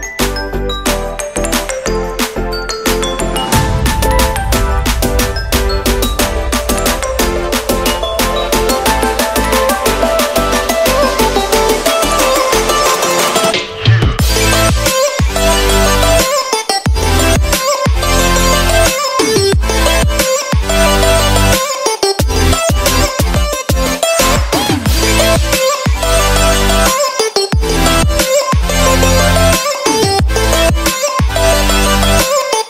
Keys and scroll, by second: 0.0 ctrl+z, 16.5 ctrl+Return.